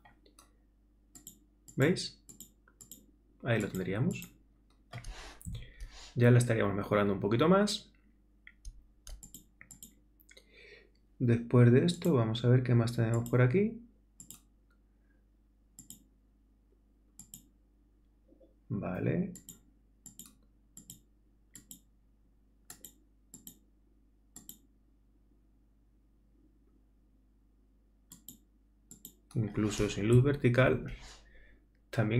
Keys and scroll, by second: 5.5 super++, 30.2 super+-.